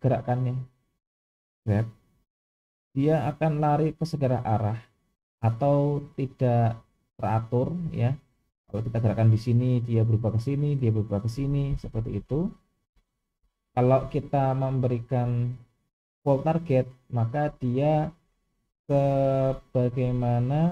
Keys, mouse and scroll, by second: 0.3-0.9 middle drag, 1.7 g, 15.1 click, 17.6-18.1 middle drag.